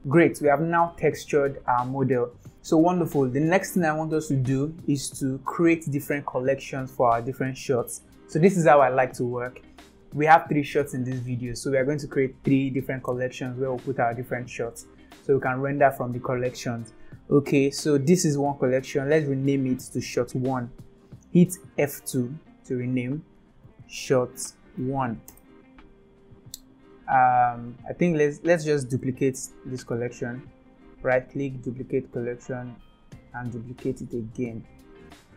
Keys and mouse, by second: 0.0 ctrl+s, 18.4 click, 21.8 F2, 25.4 Up, 27.8-28.4 drag, 30.0-31.6 right drag, 32.9-34.2 right drag, 35.1 click.